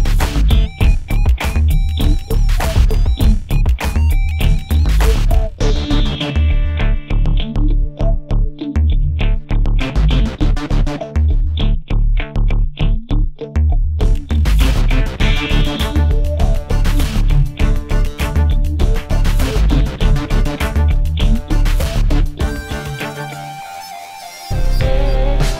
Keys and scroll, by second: 5.8 a, 7.5 a, 10.1 space, 10.6 space, 13.7 space, 17.5 Caps_Lock, 19.3 a, 23.1 a.